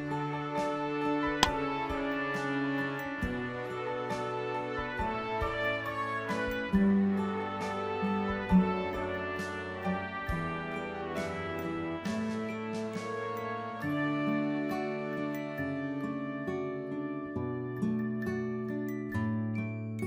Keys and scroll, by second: 0.2-1.1 typing.